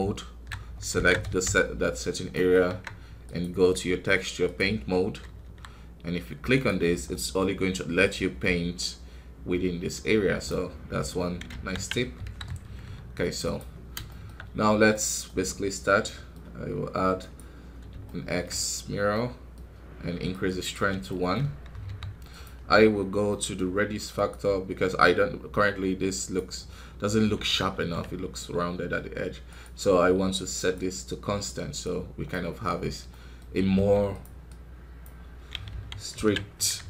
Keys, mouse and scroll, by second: 0.9 alt+a, 1.3 c, 2.6 Tab, 4.5 click, 5.4 KP_1, 6.5 click, 7.0 middle click, 7.9-11.4 drag, 11.4 ctrl+z, 12.2 KP_1, 13.3 click, 14.0-17.1 shift+middle drag, 17.1 click, 18.0-20.3 shift+middle drag, 20.3 click, 21.0 shift+middle click, 21.8 f, 25.5-26.5 drag, 26.5 scroll up 4, 27.7 ctrl+z, 31.7 click, 32.7 scroll down 1, 33.0 middle click, 33.4 scroll up 1, 33.7 f, 34.4-35.6 drag, 35.6 ctrl+z, 36.1 ctrl+z, 36.7 KP_1.